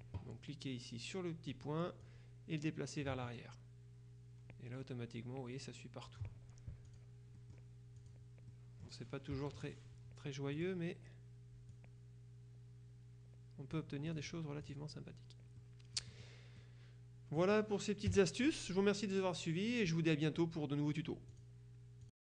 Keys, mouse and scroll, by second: 1.6 click, 7.0 click, 8.1 click, 8.6 click, 9.4 KP_Subtract, 10.7 click, 11.8-15.3 drag, 15.7-16.8 drag, 18.1 KP_Subtract, 21.4 click, 22.1 click.